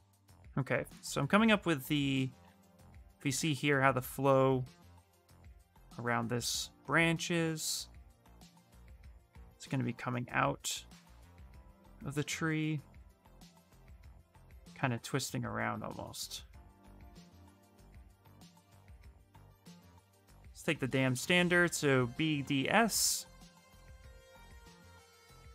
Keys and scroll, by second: 2.8 ctrl+z, 3.1 ctrl+z, 3.5 ctrl+z, 19.8-21.2 typing.